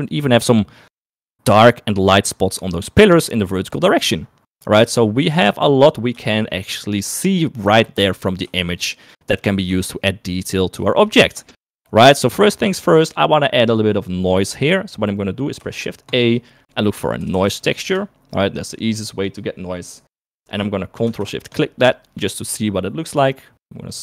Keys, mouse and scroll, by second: 3.6-4.3 scroll down 2, 6.5 shift+middle click, 8.7 shift+middle click, 10.0 shift+middle click, 10.5 shift+middle click, 11.3 shift+middle click, 11.7 shift+middle click, 15.8 shift+a, 21.6 ctrl+shift+click.